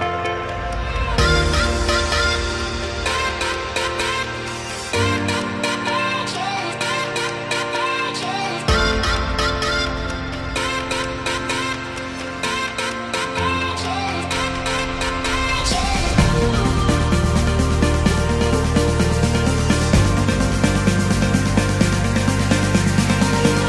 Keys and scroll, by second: 19.3 ctrl+u.